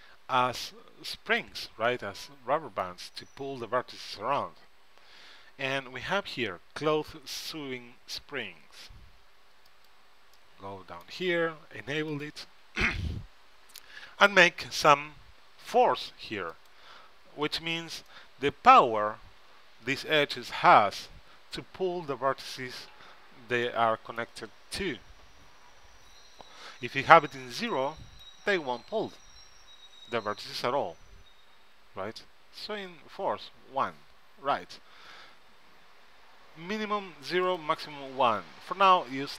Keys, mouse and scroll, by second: 2.0-3.8 middle drag, 9.8-11.5 drag, 10.5 right click, 11.4 middle click, 12.2-14.1 drag, 12.2 right click, 16.6-18.3 drag, 18.2-19.8 middle drag, 23.8 middle click, 37.6-39.3 drag.